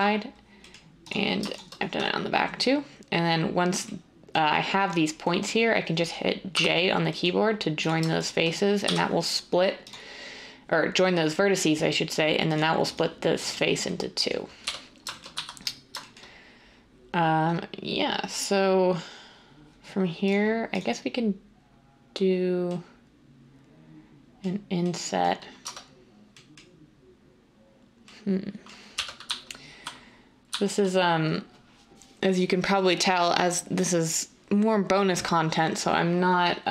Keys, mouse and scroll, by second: 6.5 j, 8.8 j, 14.6-15.3 typing, 25.6 Tab, 28.9 1, 29.2 z, 29.7 z, 30.5 z.